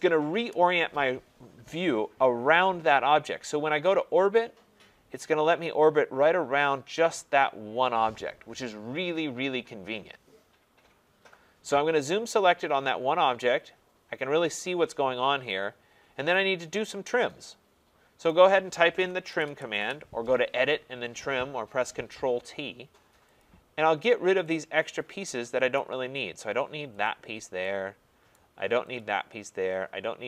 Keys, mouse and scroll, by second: 0.3 Return, 1.7-4.8 middle drag, 16.3-17.7 right drag, 18.2 right click, 19.1-20.1 typing, 23.4 click, 25.7 right click, 27.0 click, 28.4 right click, 29.0 click.